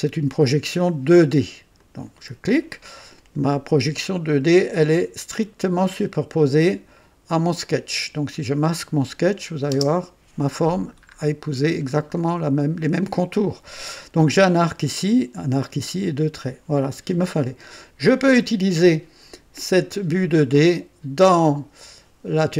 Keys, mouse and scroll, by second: 1.8 click, 7.9 click, 9.7 space, 11.0-11.4 scroll up 2, 11.6 scroll down 1, 12.2-12.9 right drag, 17.6 click.